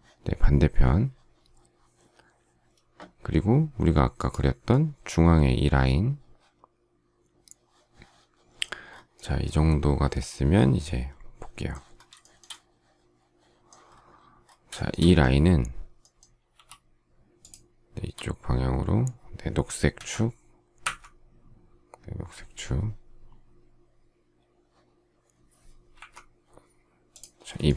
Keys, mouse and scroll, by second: 12.1 shift+middle click, 14.7 shift+middle click, 16.5 m, 27.6 shift+middle click.